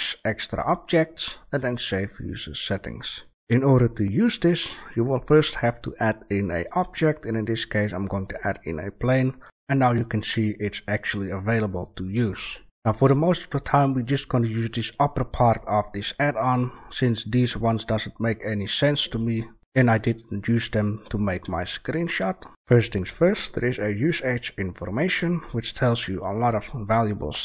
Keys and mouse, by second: 7.9 middle drag, 8.1 drag, 8.1 middle click, 8.3-9.1 middle drag, 9.4 shift+a.